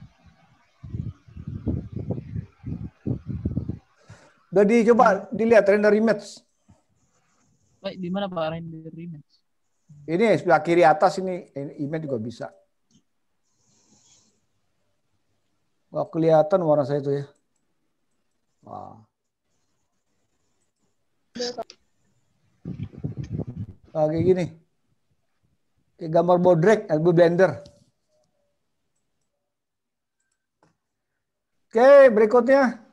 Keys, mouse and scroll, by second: 3.9 click, 17.7 click, 18.1 click.